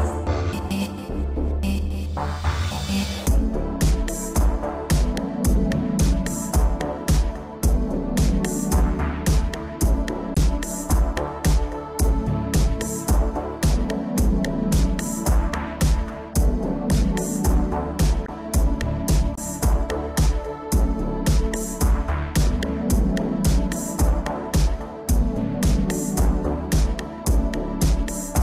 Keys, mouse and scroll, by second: 0.0 shift+space, 0.8 Escape, 1.7 middle click, 2.6 Right, 2.8 Right, 3.0 Right, 4.8 7, 5.8 ctrl+middle click, 6.8 7, 7.5 shift+middle click, 7.9 scroll up 1, 8.2 shift+middle click, 11.1 g, 11.6 click, 11.9 middle click, 12.8 shift+Left, 13.2 shift+space, 14.0 Escape, 14.4 ctrl+s, 14.6 scroll down 3, 14.9 middle click, 15.4 shift+middle click, 15.5 middle click, 15.8 ctrl+s, 16.2 middle click, 16.6 shift+space, 18.5 Escape, 18.7 middle click, 19.0 shift+space, 20.3 Escape, 20.6 middle click, 20.9 scroll up 2, 22.4 click, 24.3 click, 25.0 click, 27.1 click, 27.2 click, 27.6 middle click.